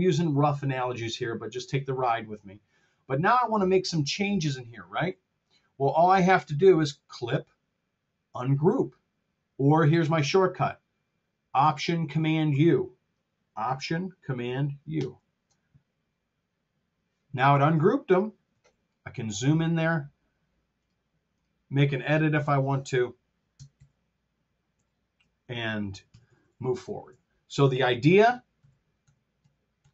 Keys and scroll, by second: 14.8 alt+super+u, 18.4 t, 22.3 BackSpace, 23.6 super+z, 26.1 r, 27.0 t, 28.1 super+z.